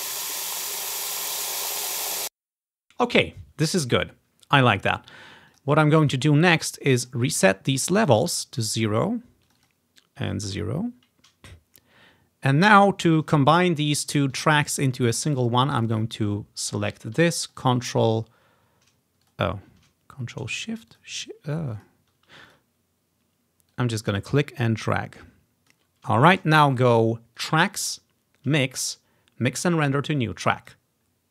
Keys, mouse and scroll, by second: 2.4 space, 5.6 click, 7.0-8.9 drag, 8.4 0, 8.7 Return, 9.6 click, 10.3 0, 10.8 Return, 11.3 click, 13.0-13.7 ctrl+scroll down 1, 13.7 typing, 14.6 ctrl+scroll down 1, 15.9 click, 16.0 click, 17.6 ctrl+click, 17.7 ctrl+click, 19.3 ctrl+shift+click, 21.0 shift+click, 21.9 ctrl+shift+click, 22.6 click, 23.8-27.3 drag, 27.5-30.6 drag, 30.7 click.